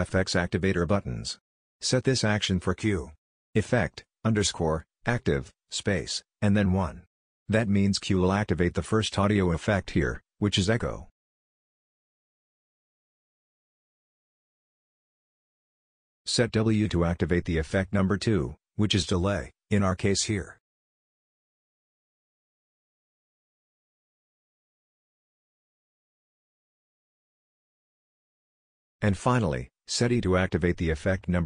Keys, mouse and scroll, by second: 1.3 q, 14.3 w, 25.3 click, 26.8 e.